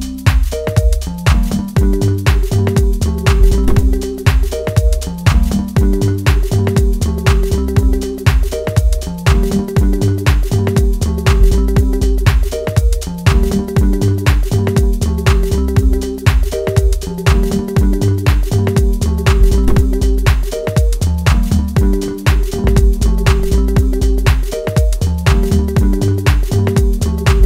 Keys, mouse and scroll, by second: 1.5-1.9 scroll up 1, 1.9-4.2 middle drag, 4.2 scroll up 1, 4.7-7.7 middle drag, 7.7-8.3 scroll down 1, 8.3-9.9 middle drag, 9.9 click, 11.3-12.0 scroll up 1, 12.0 click, 14.7-15.1 scroll down 1, 15.1-16.6 middle drag, 16.6 click, 18.3 scroll up 1, 19.0-22.9 middle drag, 22.9 click, 23.4-23.9 scroll up 1, 24.0 shift+middle click, 25.1-25.5 scroll up 2, 25.5 shift+middle click, 26.5 click.